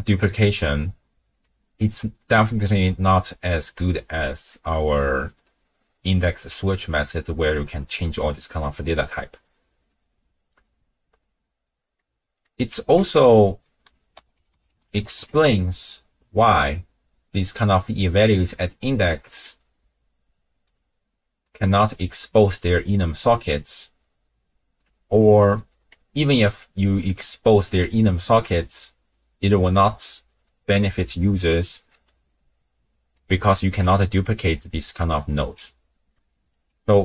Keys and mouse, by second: 4.5-6.8 drag, 7.4 click, 11.9 middle click, 13.0 ctrl+a, 19.3-21.9 drag, 33.1 click, 33.6 ctrl+shift+d, 35.4 x, 36.1 click, 36.7 n.